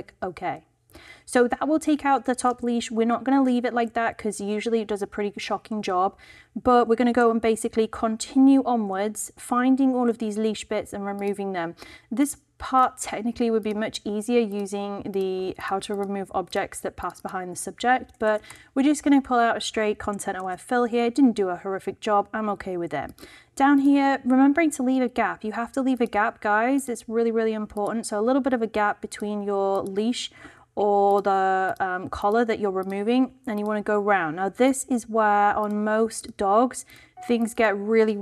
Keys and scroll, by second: 2.5 super+d, 18.2 shift+BackSpace, 18.4 shift+Return, 19.3 Return, 20.5 super+d.